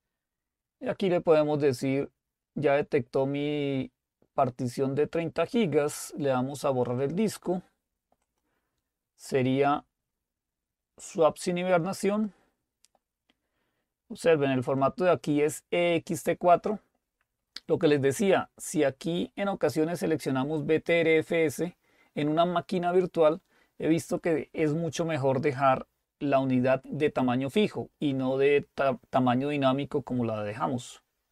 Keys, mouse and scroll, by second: 8.3 click, 12.6 click, 15.0 click, 24.2 click.